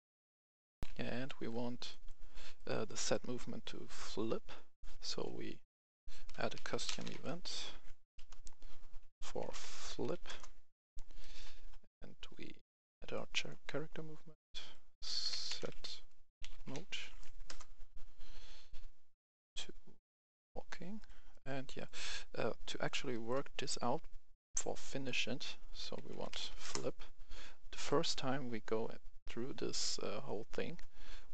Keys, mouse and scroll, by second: 0.8 F11, 0.8 F10, 1.2 right click, 1.5 scroll down 1, 1.8 right click, 6.2-7.0 typing, 8.1 Return, 9.3-10.0 typing, 10.2 Return, 11.1 right click, 12.5-13.0 scroll down 2, 13.0-15.8 drag, 15.0-16.6 typing, 17.4 Return, 18.6-19.8 drag, 21.2 right click, 21.8 click, 22.6 right click, 23.8-24.7 scroll up 1, 24.7-25.8 drag, 25.9-26.4 typing, 26.5 Return, 27.8 right click, 28.0-31.2 scroll down 1.